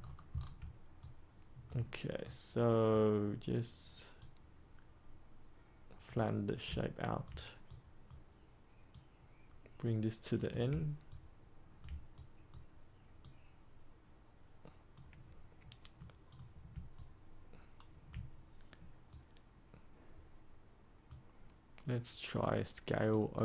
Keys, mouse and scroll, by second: 0.9 ctrl+right click, 2.2-3.5 right drag, 4.1-6.5 drag, 6.7 ctrl+right click, 7.6 right click, 8.8-10.6 drag, 11.0 ctrl+right click, 12.1 right click, 13.1-15.6 drag, 16.9 ctrl+right click, 19.0-21.7 right drag, 23.0-23.4 drag.